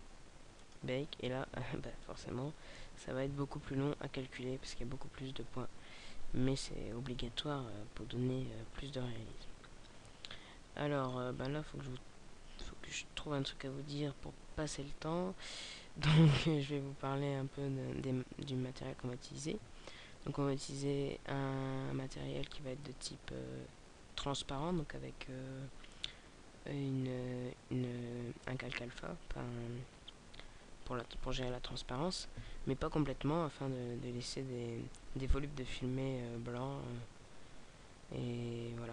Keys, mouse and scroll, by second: 0.5 click.